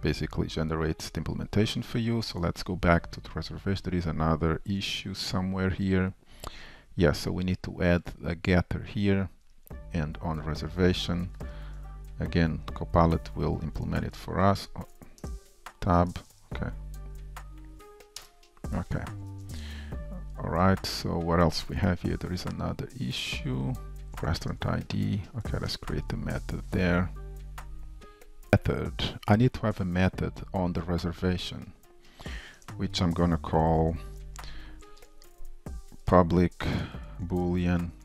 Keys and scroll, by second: 1.7 super+s, 4.8 F2, 12.7 shift+Return, 14.7 super+z, 16.3 super+z, 19.1 super+s, 22.4 F2, 24.5 alt+Return, 36.0 Tab, 37.0 super+z.